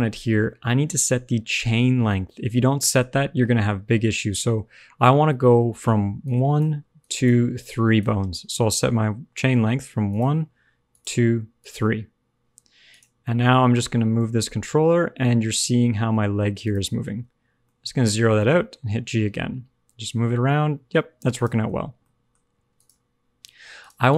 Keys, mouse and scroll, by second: 2.1 middle click, 5.9-8.1 typing, 6.2 click, 6.9 click, 7.6 click, 10.6 click, 10.8 click, 11.5 click, 12.8 click, 13.1 middle click, 14.1 g, 16.9 alt+r, 17.0 alt+g, 17.6 middle click, 18.3 g, 21.5 alt+r, 21.6 alt+g, 21.7 scroll down 3, 21.9 middle click, 22.3-23.7 scroll up 2, 22.7 click, 23.7 click, 24.0 click.